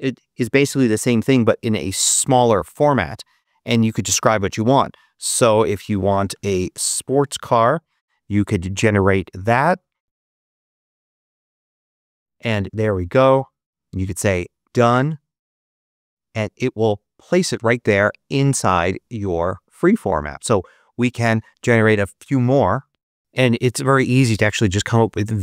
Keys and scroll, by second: 5.2-6.8 typing, 7.5 Return.